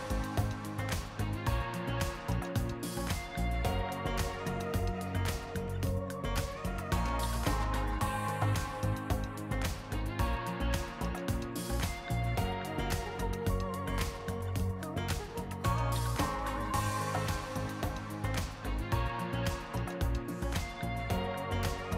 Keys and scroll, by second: 2.4-2.9 shift+scroll, 7.6-8.4 scroll, 8.5 BackSpace, 9.1-10.1 shift+scroll, 10.1 shift+r, 10.8 r, 11.1 Return, 12.7 t, 16.4 r, 18.1 f, 19.8 r.